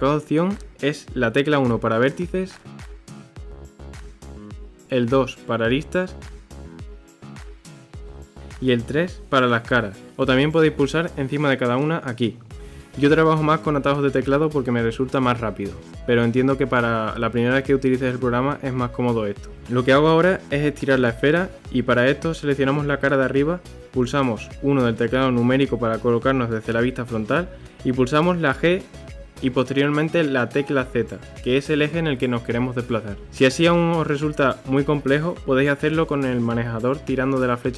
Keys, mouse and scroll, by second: 2.3 click, 3.3 click, 4.4 ctrl+z, 5.0 2, 6.5 click, 7.1 click, 8.6 ctrl+z, 9.5 3, 10.2 click, 10.9 click, 11.3 ctrl+z, 12.0 click, 12.8 click, 13.3 click, 13.7 ctrl+z, 14.2 click, 14.8 click, 15.7 ctrl+z, 16.2 click, 16.5 click, 17.3 ctrl+z, 18.2 click, 18.9 click, 19.6 middle click, 20.3-22.3 scroll down 1, 22.3 3, 22.6 click, 24.3 KP_1, 25.6 g, 32.5 ctrl+r, 34.6 click, 34.8 click, 35.7 click, 36.5 click.